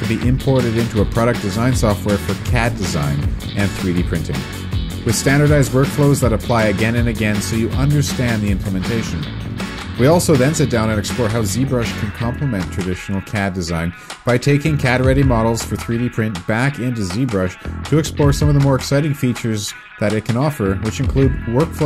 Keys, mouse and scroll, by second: 0.3 click, 0.6 scroll down 1, 0.7 scroll up 1, 0.9 click, 1.6 right click, 1.7 click, 4.7 Escape, 10.1 Tab, 21.7 q.